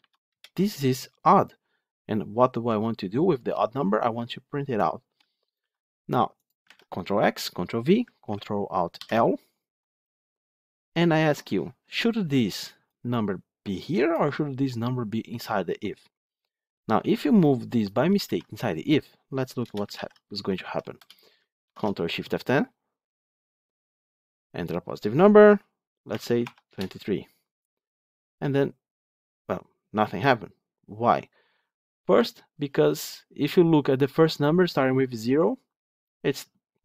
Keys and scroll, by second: 5.5 ctrl+x, 6.9 ctrl+v, 12.8 ctrl+alt+l, 18.1 ctrl+x, 19.8 ctrl+v, 21.5 ctrl+shift+F10.